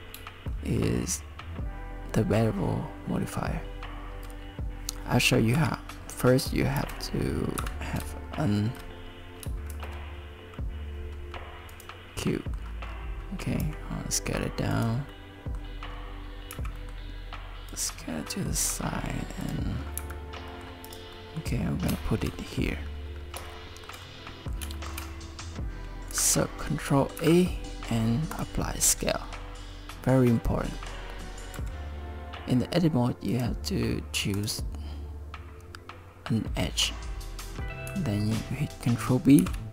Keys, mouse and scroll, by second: 0.5 shift+middle click, 5.6 KP_1, 6.8 shift+s, 9.7 shift+a, 11.8 shift+a, 12.2 middle click, 12.9-13.6 scroll down 4, 13.6 s, 15.1 middle click, 15.9-16.3 scroll up 2, 16.5 s, 18.0 middle click, 18.6 s, 19.8 scroll down 4, 20.0 g, 21.1 middle click, 22.0 shift+middle click, 22.9-23.3 scroll up 4, 23.5 shift+middle click, 24.0 middle click, 24.8 shift+middle click, 27.2 ctrl+a, 30.7 middle click, 31.6 Tab, 33.3 click, 34.4 click, 39.4 ctrl+b.